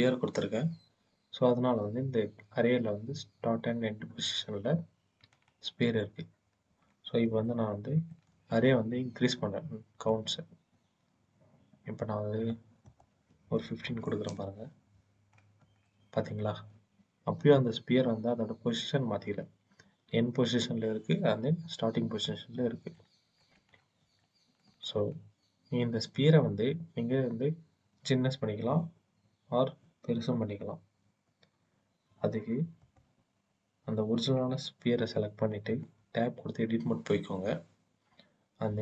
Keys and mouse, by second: 7.2-8.0 shift+drag, 10.0-12.3 drag, 12.7-14.2 drag, 15.7 shift+click, 15.9 shift+middle click, 22.6-23.2 shift+drag, 24.0 shift+drag, 24.2 shift+middle click, 35.7 Tab, 38.5 s.